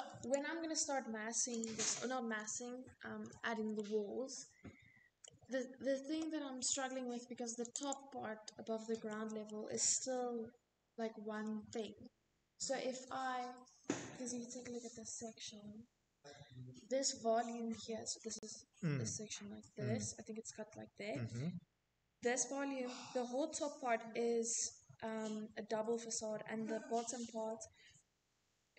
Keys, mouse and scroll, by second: 0.5 click, 1.2-1.5 scroll, 2.1-2.5 scroll, 4.1 middle click, 6.6 click, 6.8 click, 8.4 middle click, 8.9 middle click, 8.9 middle click.